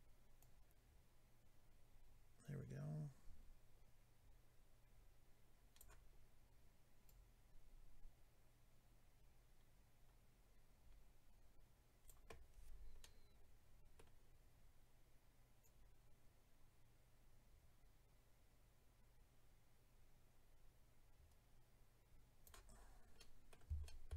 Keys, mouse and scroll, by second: 0.4 click, 7.0 click, 13.0 middle click, 15.6 click, 22.7-23.3 scroll down 3, 23.2 middle click, 23.8 shift+middle click.